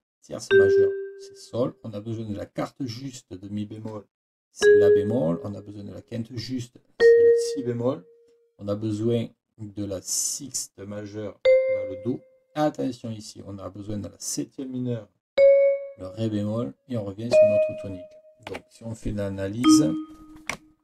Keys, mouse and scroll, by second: 18.5 Escape, 19.6 click.